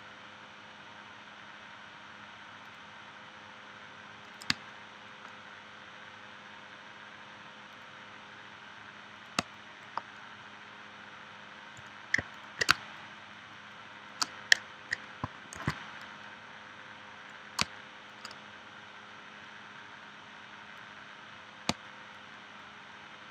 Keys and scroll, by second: 4.5 space, 9.4 space, 12.7 space, 15.5 shift+c, 17.6 space, 21.7 space.